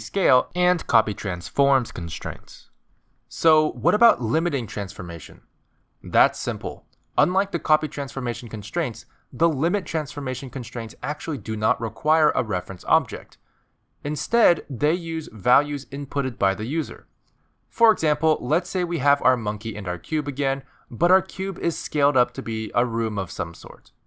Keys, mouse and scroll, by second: 14.9 click, 16.3 click, 17.3 click, 19.3 click, 21.5 alt+g, 21.9 middle click, 23.4 s.